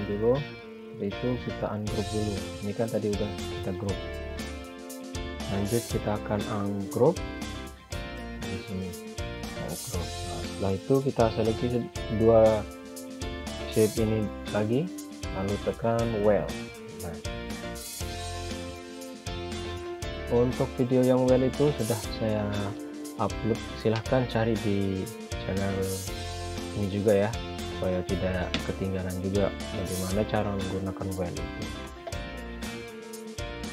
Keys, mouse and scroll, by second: 1.8 click, 5.6 click, 14.7 shift+click, 16.9 click, 21.0 click, 24.5-25.4 scroll up 1, 27.0 click.